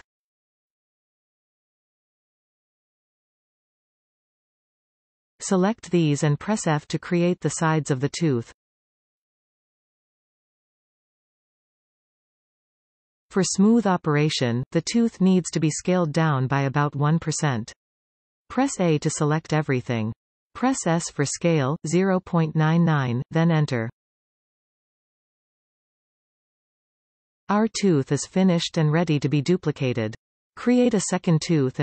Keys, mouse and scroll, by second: 0.4-1.4 drag, 1.4-3.5 middle drag, 3.5 a, 6.2 alt+shift+click, 6.6-7.5 middle drag, 7.5 f, 7.8-9.7 middle drag, 9.7 alt+a, 10.4 alt+shift+click, 11.3 f, 11.7-15.5 middle drag, 14.4-15.5 scroll down 2, 15.5 KP_1, 16.5 shift+middle click, 20.1 a, 22.4 s, 24.9 Return, 25.8-30.3 middle drag.